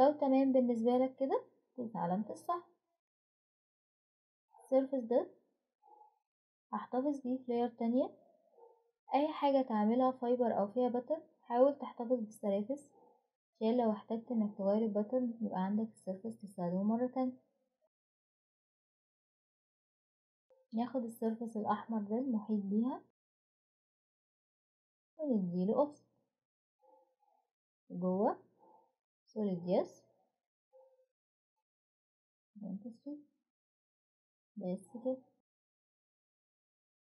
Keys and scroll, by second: 32.5-33.2 typing.